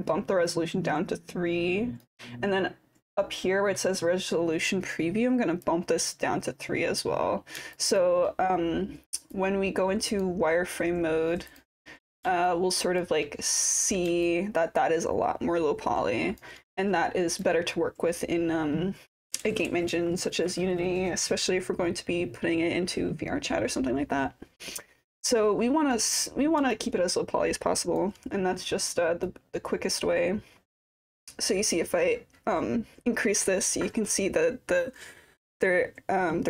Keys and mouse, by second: 0.6-2.0 drag, 5.6-7.0 drag, 7.7 alt+click, 9.3 click, 11.5 click, 12.5 alt+click, 13.7 click, 14.3-16.4 alt+drag, 17.4-26.0 drag, 26.7-28.0 alt+drag, 29.4-36.4 drag.